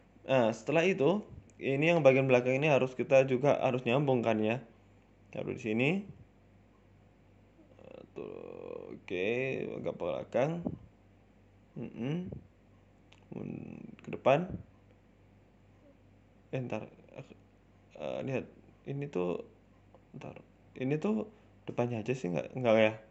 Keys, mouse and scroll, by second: 0.0 shift+middle click, 0.3 KP_3, 0.5 KP_1, 0.9-1.9 scroll up 11, 1.1 shift+middle click, 1.7 shift+middle click, 1.9 Tab, 2.4 click, 3.1 e, 6.6 click, 7.4 r, 8.5 g, 10.5 r, 11.4 g, 12.4 r, 13.3 g, 13.9 shift+middle click, 14.7 ctrl+z, 15.2 ctrl+z, 15.4 ctrl+z, 15.8 shift+middle click, 16.3 click, 17.2 r, 18.1 g, 19.0 r, 20.5 shift+middle click, 21.1 click, 22.0 click, 22.8 g.